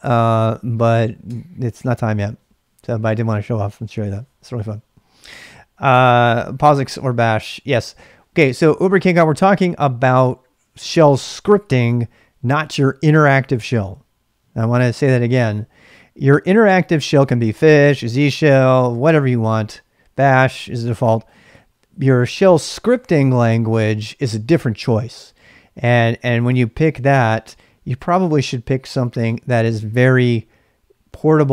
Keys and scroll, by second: 0.1 k, 1.2 Return, 28.8-29.6 typing.